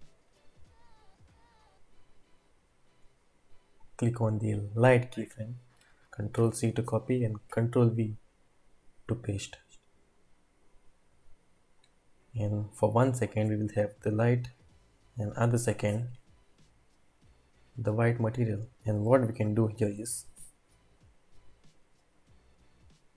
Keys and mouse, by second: 0.3 click, 2.4-3.1 drag, 6.3 ctrl+c, 7.5 ctrl+v, 11.8-18.7 drag, 19.9-23.1 drag.